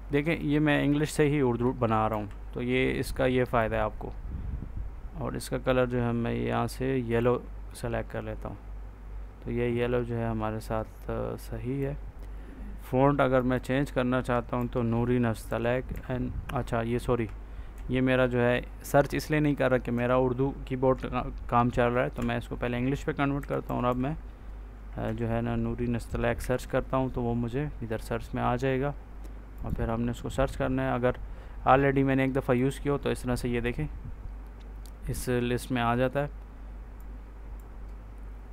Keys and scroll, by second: 2.0 ctrl+a, 14.5 ctrl+a, 15.3 n, 15.8 o, 17.6 ctrl+a, 19.8 BackSpace, 22.0 space, 23.0-24.9 typing, 26.3 o.